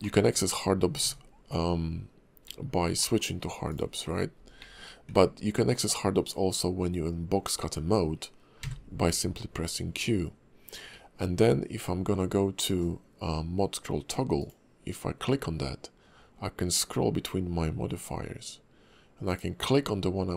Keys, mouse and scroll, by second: 0.0 shift+middle click, 0.4-1.0 scroll down 1, 1.0 q, 2.4 alt+w, 3.0 middle click, 3.3-3.7 scroll up 1, 3.7 click, 4.0-4.6 scroll down 3, 4.6 alt+w, 4.7-5.1 scroll up 1, 5.1 q, 7.8-8.2 scroll up 2, 8.6 q, 20.1 scroll down 1.